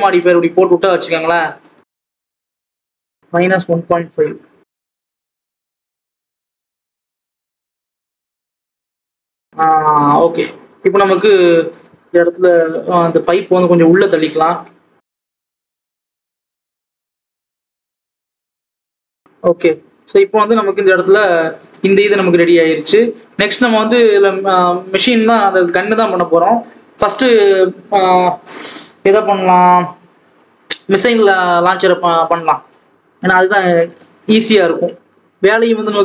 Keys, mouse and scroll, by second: 6.8-7.5 scroll up 1, 7.5 g, 9.0-10.1 scroll down 2, 9.1 alt+a, 10.1 click, 11.8 scroll up 2, 12.1 Tab, 13.6 click, 14.2-15.3 scroll up 3, 15.3 click, 17.1 x, 17.2-17.6 scroll down 5, 18.0 click, 19.1 Tab, 19.3 alt+a, 19.5 scroll down 2, 19.7 Tab, 20.1 alt+a, 20.3 click, 21.8-22.2 scroll up 2, 22.2-23.8 scroll down 2, 23.8 alt+a, 24.3 click, 31.7-32.4 scroll up 2, 32.4-32.9 scroll down 1, 32.9 KP_7.